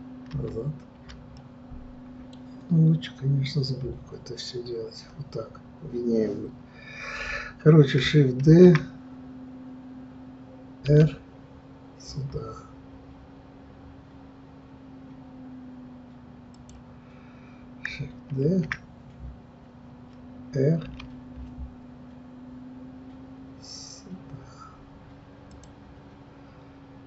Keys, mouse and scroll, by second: 0.3 ctrl+z, 1.4-3.8 middle drag, 3.8 KP_3, 8.4 shift+d, 18.4 shift+d.